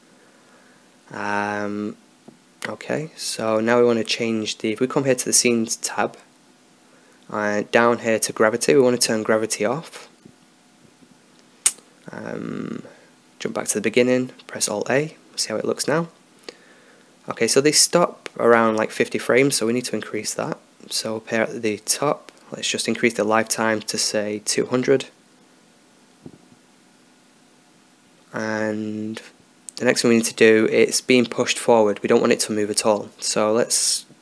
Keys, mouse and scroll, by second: 3.6-8.6 drag, 11.0-16.2 drag, 16.2 alt+a, 17.3 middle click, 20.0-25.7 drag, 26.9 0, 28.4-30.0 drag, 29.3 alt+a, 32.3-34.2 drag.